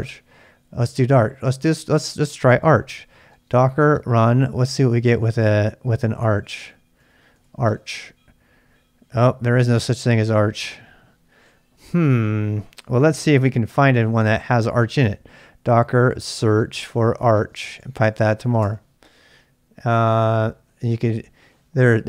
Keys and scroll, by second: 0.0-8.2 typing, 9.7-10.6 typing, 13.3 ctrl+c, 13.4-19.1 typing.